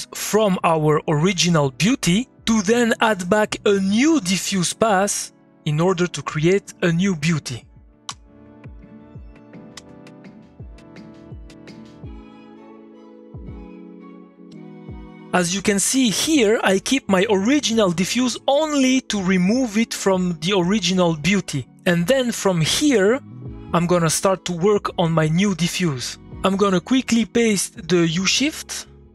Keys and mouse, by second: 6.6-8.1 drag, 8.1 m, 8.7 click, 9.7 shift+x, 10.1 click, 10.9-14.0 ctrl+drag, 14.5 2, 16.3-22.5 drag, 22.7-24.3 drag, 24.3-28.5 middle drag, 28.6 click, 28.8 middle click.